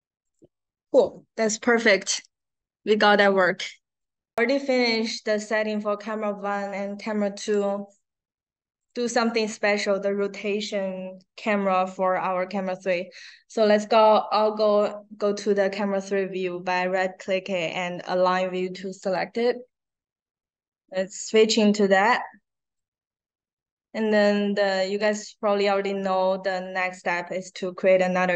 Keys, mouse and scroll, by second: 0.2 click, 2.0 click, 3.9 click, 7.3 click, 8.8 click, 12.4 right click, 18.9 click, 22.6 click, 24.9 right click.